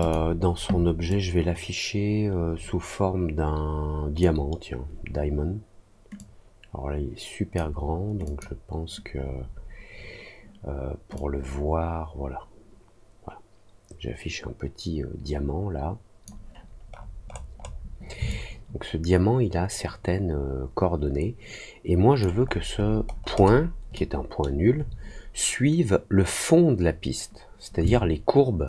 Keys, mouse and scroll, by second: 1.0-4.1 drag, 6.1-7.5 drag, 8.2 click, 11.1-16.2 drag, 16.8 middle click, 17.2 middle click, 17.5 middle click, 18.2-22.1 alt+drag, 22.4 alt+middle click, 22.4-23.5 alt+scroll up 4, 22.7 alt+middle click, 23.0 alt+middle click, 23.3 alt+middle click, 23.9 alt+middle click, 27.8 alt+click.